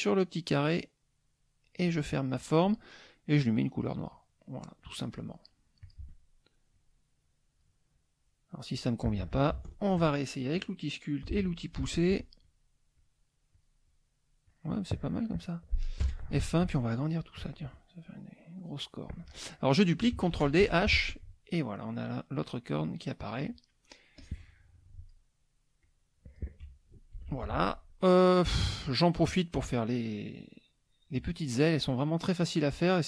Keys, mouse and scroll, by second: 0.6-2.1 drag, 4.1 click, 5.8 click, 6.7 click, 9.9 shift+F2, 11.3 shift+p, 12.4 click, 13.0 click, 13.5 click, 14.4 click, 16.0 F1, 16.8 ctrl+shift+click, 17.5-19.2 ctrl+shift+drag, 20.3 ctrl+d, 20.6 ctrl+h, 21.1-22.6 ctrl+drag, 23.4 middle click, 24.1-25.3 drag, 25.8 click, 27.2 ctrl+g, 27.4 ctrl+click, 27.7-28.8 ctrl+middle drag, 29.0 ctrl+middle click, 31.3 middle click.